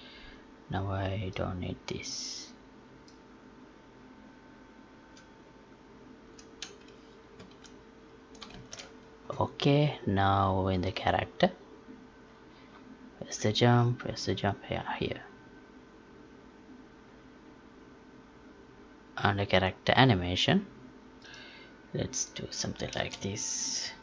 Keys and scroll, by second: 6.2 Delete, 7.3 ctrl+s, 8.5 ctrl+shift+s.